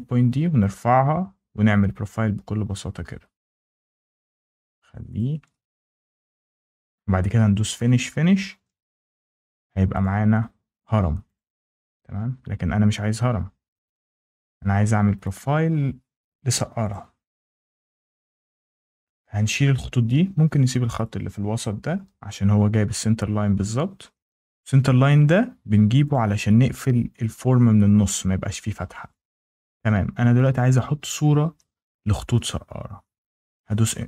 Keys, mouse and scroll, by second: 0.6 click, 2.2-2.7 scroll, 3.6 scroll, 4.4 scroll, 5.0 click, 5.3 scroll, 6.6 click, 6.8 scroll, 8.1 Escape, 9.9 click, 10.7 click, 11.2 click, 13.0 ctrl+z, 13.9 ctrl+z, 15.1 click, 16.3 Delete, 16.8 click, 17.7 Delete, 18.9 click, 20.2 ctrl+z, 20.9 click, 21.4 Delete, 26.0 click, 30.6 click.